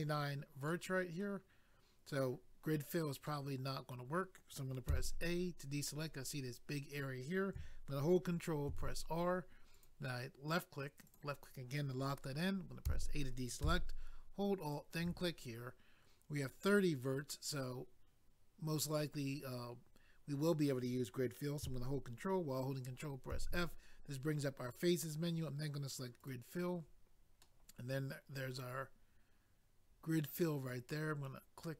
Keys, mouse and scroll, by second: 0.7 middle click, 3.2 middle click, 4.9 a, 8.7 ctrl+r, 9.7 click, 9.8 click, 11.0 click, 11.1 click, 12.9 a, 14.6 alt+click, 14.8 alt+click, 26.2 click, 27.4 middle click.